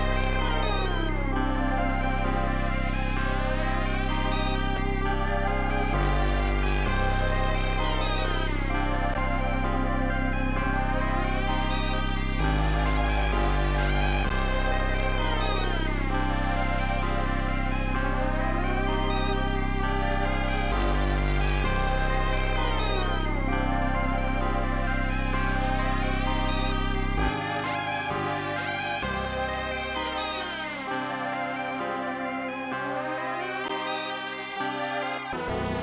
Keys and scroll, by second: 5.0 super+s, 10.5 super+z, 21.1 super+s, 31.7 super+s, 32.4 d, 32.9 d, 33.5 g.